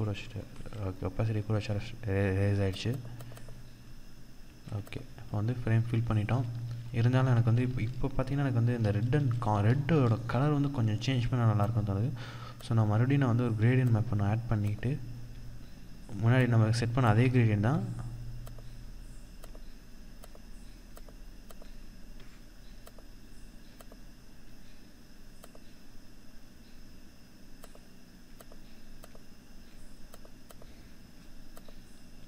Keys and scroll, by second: 5.6 ctrl+=, 6.7 ctrl+-, 7.0 ctrl+0, 8.1 ctrl+-, 8.6 ctrl+-, 8.9 ctrl+0, 11.7 ctrl+0.